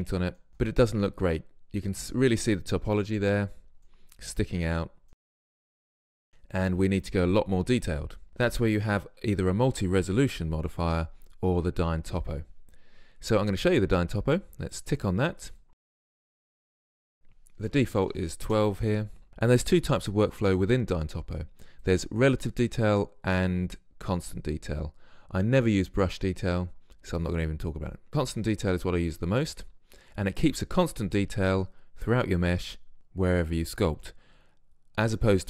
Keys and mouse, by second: 0.1 middle click, 0.1 click, 0.2-3.6 middle drag, 3.6 Tab, 4.0-5.6 middle drag, 5.6 Tab, 6.0 middle click, 8.3 ctrl+z, 14.7-18.5 drag, 21.9-23.7 drag, 28.1-29.1 drag.